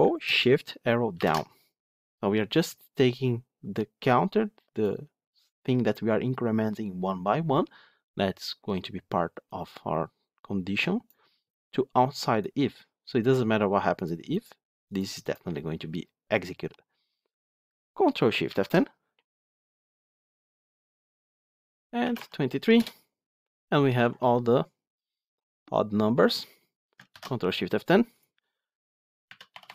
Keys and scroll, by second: 1.1 ctrl+shift+Down, 18.4 ctrl+shift+F10, 27.1 ctrl+shift+F10.